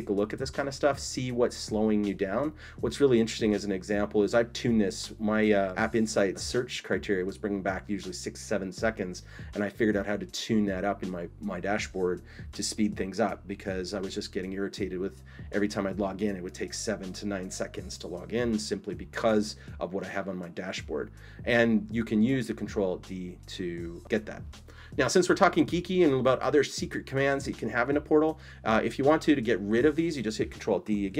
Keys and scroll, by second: 30.9 ctrl+alt+d.